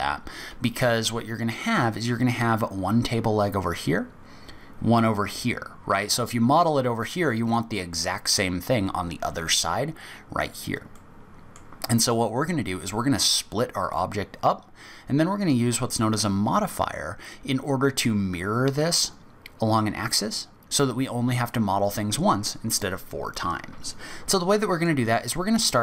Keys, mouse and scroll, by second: 10.9 middle click, 24.3 middle click, 25.0-25.5 scroll down 2, 25.5 scroll up 1.